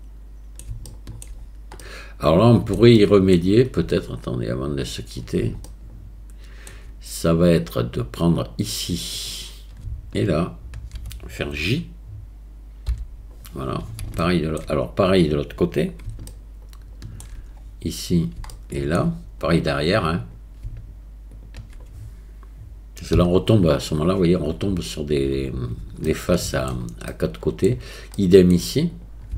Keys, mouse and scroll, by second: 0.9 shift+middle click, 1.8 middle click, 3.0 shift+middle click, 5.0 middle click, 5.7-6.7 shift+drag, 14.2 ctrl+click, 16.3 shift+click, 18.5 shift+middle click, 26.1 shift+middle click, 27.1 middle click, 28.2 middle click, 29.0 click.